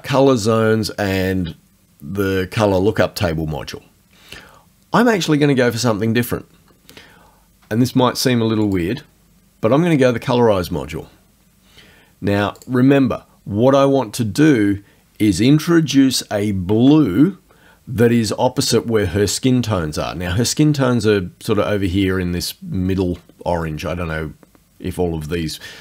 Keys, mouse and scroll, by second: 8.7 click, 12.6 click, 15.9 alt+Tab.